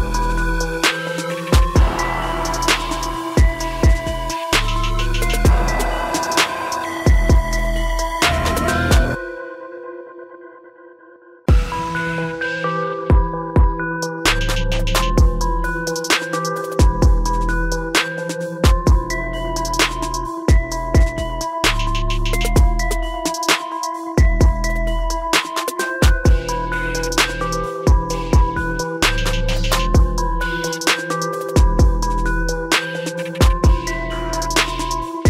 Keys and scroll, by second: 16.3 ctrl+t, 24.9 BackSpace, 27.2 BackSpace, 29.7 ctrl+a.